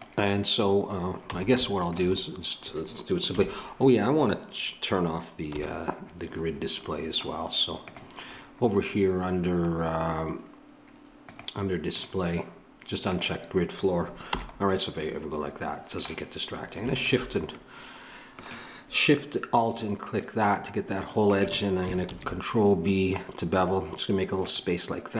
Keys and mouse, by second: 1.3 a, 1.6-3.3 middle drag, 3.3 KP_3, 5.5 n, 7.8-9.1 drag, 14.3 click, 14.3 n, 14.7-16.9 middle drag, 16.9-22.1 drag, 22.1 ctrl+b.